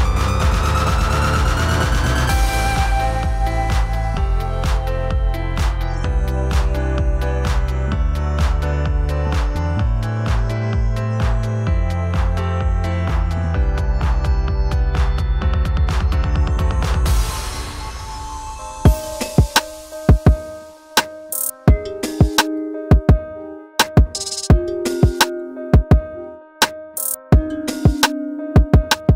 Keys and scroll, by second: 12.5 v.